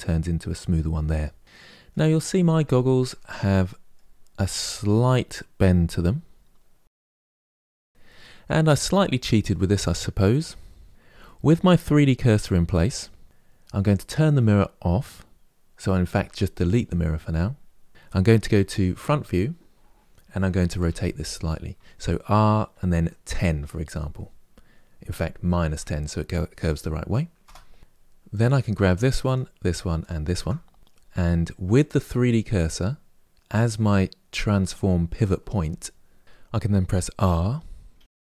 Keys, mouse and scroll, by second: 1.4-1.8 middle drag, 1.8-2.5 scroll down 1, 2.5-6.1 shift+middle drag, 7.9-10.9 middle drag, 11.0-14.0 shift+middle drag, 16.5 click, 18.8 KP_1, 20.6 r, 28.0 click, 29.0 shift+click, 29.7 shift+click, 31.5-34.0 drag, 37.1 r.